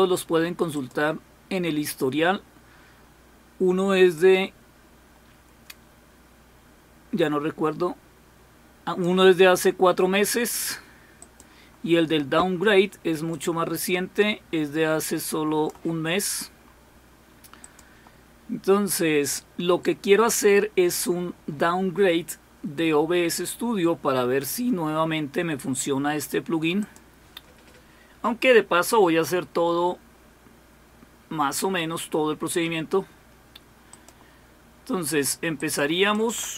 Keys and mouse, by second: 0.7 click, 4.1-9.5 drag, 11.2 click, 13.3-15.7 drag, 17.6 click, 26.8 click, 27.1 click, 33.9 click, 35.6 click.